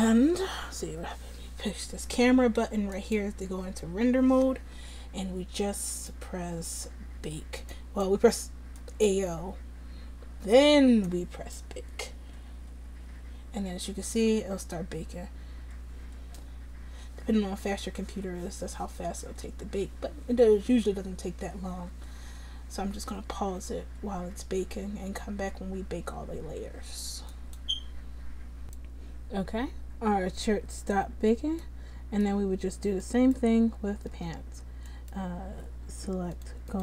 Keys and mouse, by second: 33.2-34.4 right drag, 34.4 Tab, 34.4-36.4 drag.